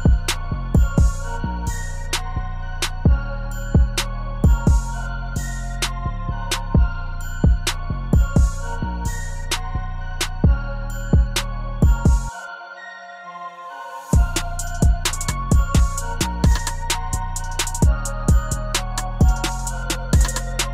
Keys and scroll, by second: 12.4 ctrl+u.